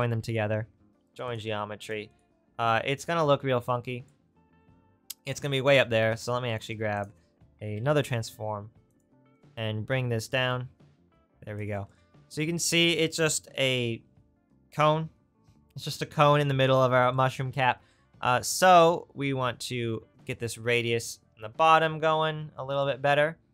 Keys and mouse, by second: 1.9 click, 6.8 shift+a, 9.4 click, 18.5-22.8 drag, 22.8-23.5 right drag.